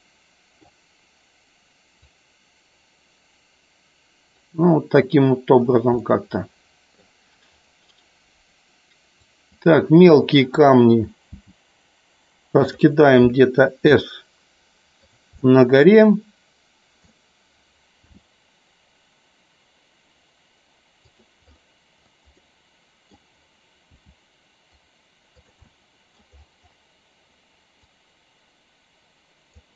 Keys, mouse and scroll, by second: 2.1-4.3 drag, 5.9-7.0 middle drag, 9.2-9.6 drag, 12.5 click, 13.9 s, 15.3-17.0 middle drag, 21.0 click, 22.2 scroll up 1, 22.5-23.1 middle drag, 25.3 click, 25.6 middle click, 27.8-29.5 drag.